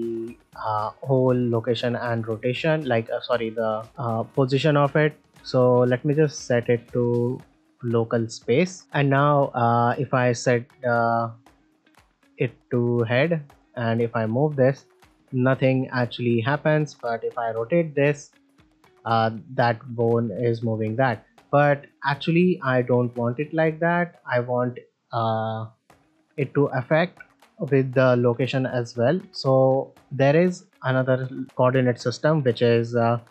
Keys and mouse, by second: 0.4-0.7 middle drag, 1.6 shift+middle drag, 1.9 ctrl+middle click, 2.2 middle drag, 3.3 ctrl+middle drag, 3.7 middle drag, 5.8-6.5 drag, 7.5-8.2 drag, 8.8 shift+middle click, 8.8 click, 9.8-12.2 drag, 12.6 middle click, 12.9 ctrl+middle drag, 15.9-16.2 right drag, 16.4 click, 17.4 r, 20.4 right click, 21.4-21.8 middle drag, 23.5 click, 25.7 r, 26.2-26.7 right drag, 26.7 click, 27.7 g, 31.4-33.3 drag.